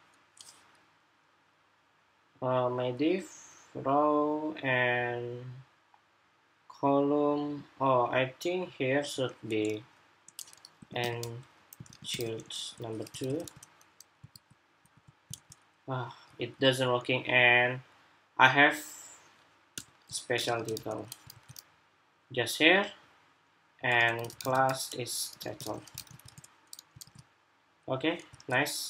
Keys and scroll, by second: 12.9 super+s, 14.0 super+r, 14.5 super+r, 15.5 super+Tab, 21.0 super+s, 25.7 super+s, 26.0 super+Tab, 26.7 super+r, 28.0 super+Tab.